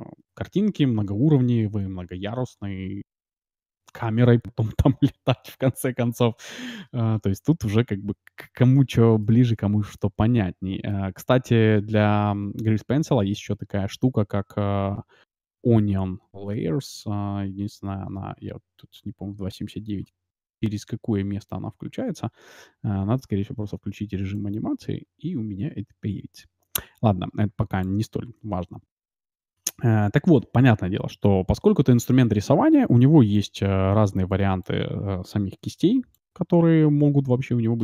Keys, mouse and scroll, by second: 2.9 scroll up 1, 3.1-5.3 middle drag, 8.0-8.4 scroll up 1, 8.4-11.9 middle drag, 18.0-22.5 middle drag, 24.3-26.2 drag, 28.4-30.8 middle drag, 33.3-37.6 drag, 35.6-36.3 d, 36.7-37.8 middle drag.